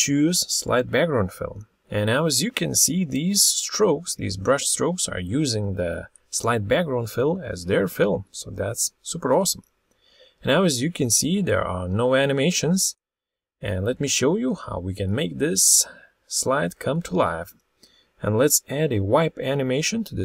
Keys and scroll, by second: 12.9 Escape.